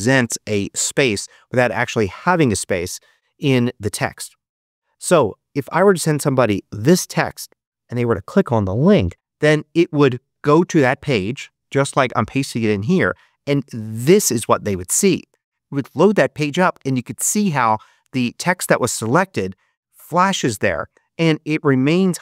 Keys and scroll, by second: 10.4 super+v, 14.0 Return.